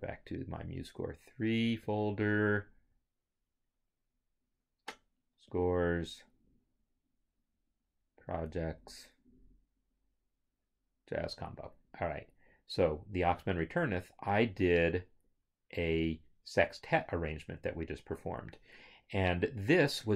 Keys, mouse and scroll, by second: 5.5 click, 8.2 click, 11.4 click, 13.4 click, 17.0 scroll.